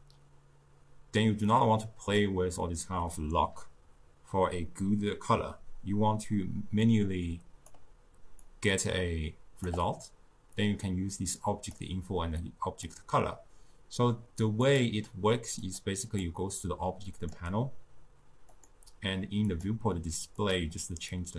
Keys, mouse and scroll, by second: 1.5-5.0 drag, 6.9-10.7 drag, 12.5 click, 14.8 click, 15.7 click, 16.1 click, 17.3-19.0 drag, 19.5-20.6 drag.